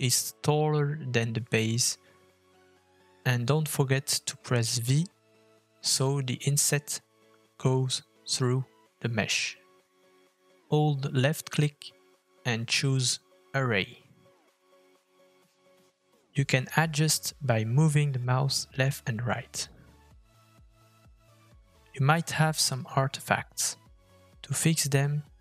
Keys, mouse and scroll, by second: 2.5 middle click, 20.2 middle click, 20.4-20.9 scroll up 3, 20.9 middle click, 21.5 shift+middle click, 22.1 scroll up 1, 23.2 shift+middle click.